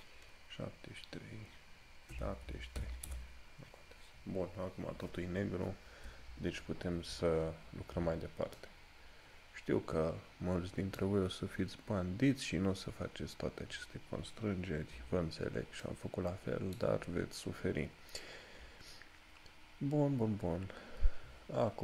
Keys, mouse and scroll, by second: 15.9 scroll up 1, 16.0 middle click, 17.2 scroll down 1, 20.5 scroll up 1.